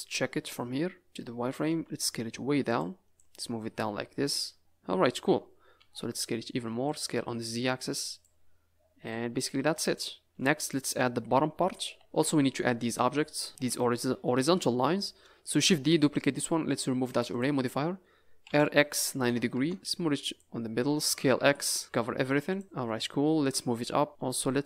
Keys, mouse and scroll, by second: 0.5 z, 1.6 s, 3.1 click, 3.4-4.1 scroll up 8, 4.4 scroll down 2, 4.6 click, 5.7 s, 7.1 s, 9.1 click, 10.2 middle click, 10.7 scroll up 3, 11.9 KP_Decimal, 12.0 scroll down 3, 12.5-13.1 scroll up 2, 14.2 middle click, 15.5 shift+d, 17.3 click, 18.4 r, 18.5 s, 19.7 click, 21.2 s, 22.6 click, 23.5 click, 24.1 middle click, 24.1 scroll up 2.